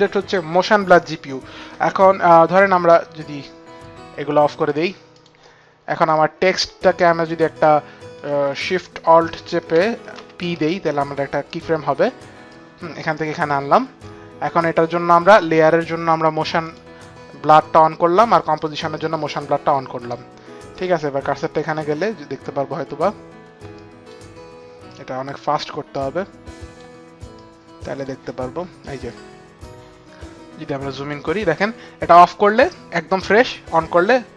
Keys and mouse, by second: 4.6 click, 5.0 click, 5.9 click, 8.3 click, 10.1 alt+shift+p, 10.1 click, 11.4 click, 12.4 click, 20.7 click, 20.8 click, 23.7 click, 24.9 click, 27.3 click, 29.6 click, 32.1 click.